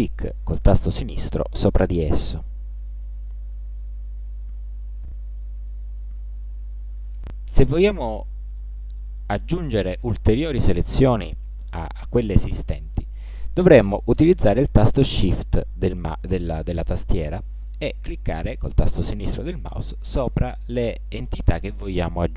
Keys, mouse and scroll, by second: 0.0 click, 1.3 click, 2.0 click, 3.2 click, 4.4 click, 5.6 click, 6.7 click, 19.5 shift+click, 20.9 shift+click.